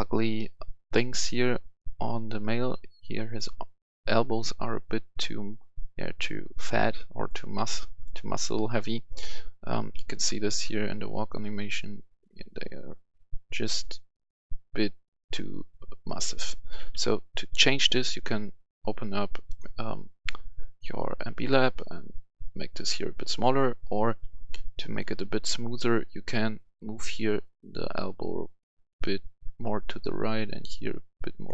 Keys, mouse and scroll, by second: 9.1-10.7 typing, 12.0 typing, 13.1-13.5 typing, 14.7 typing, 16.9 Escape, 19.4-31.5 drag.